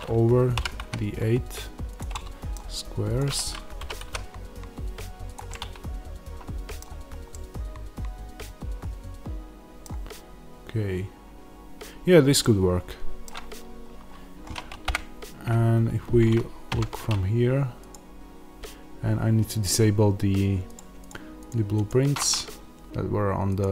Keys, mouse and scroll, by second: 0.5 g, 1.9 click, 2.0-3.1 middle drag, 3.1 click, 3.7 g, 5.2 click, 5.4-20.5 middle drag, 13.5 scroll up 2, 13.7-14.7 scroll down 2, 14.7 KP_0, 16.6 Tab, 20.5-23.7 drag.